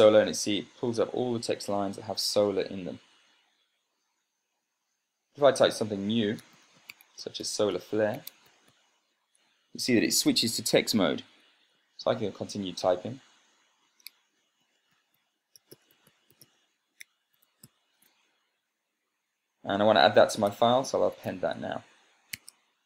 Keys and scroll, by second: 7.1-9.9 typing, 14.6-18.7 typing, 21.2 Tab, 21.6-22.4 typing.